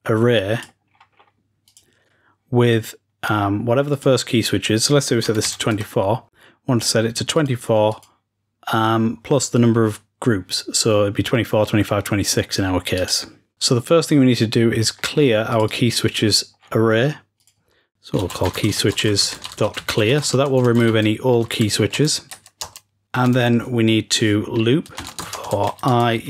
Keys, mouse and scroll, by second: 0.6 click, 0.8-1.1 scroll down 2, 0.9 click, 1.1-2.5 drag, 3.8-6.4 drag, 7.2-8.4 scroll down 2, 8.4-10.4 drag, 12.9 click, 13.1 scroll down 2, 14.6-15.4 scroll up 2, 15.5 click, 16.5-17.3 scroll down 1, 17.4-19.1 drag, 25.2-26.0 scroll down 1.